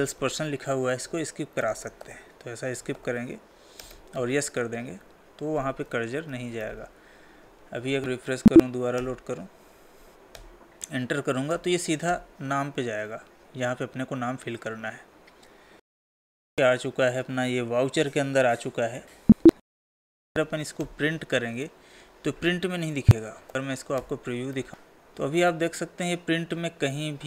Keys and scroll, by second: 5.8 Tab, 7.2 ctrl+s, 7.7 alt+Tab, 8.1 Escape, 15.8 Escape, 19.5 Escape, 23.7 ctrl+p.